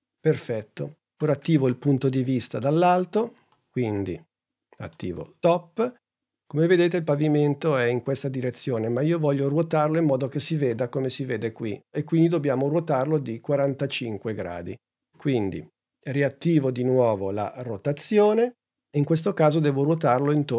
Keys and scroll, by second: 8.6 super+Tab, 18.0 r.